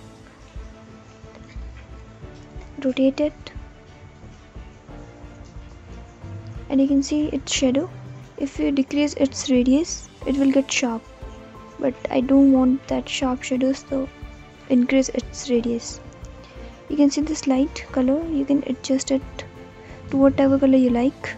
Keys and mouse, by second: 0.8 alt+click, 2.5 r, 4.6 alt+drag, 4.9 alt+middle click, 5.0 alt+click, 6.9 alt+click, 8.2 click, 8.9 click, 9.5 click, 10.3 click, 12.4 click, 15.3 middle click, 17.7 click.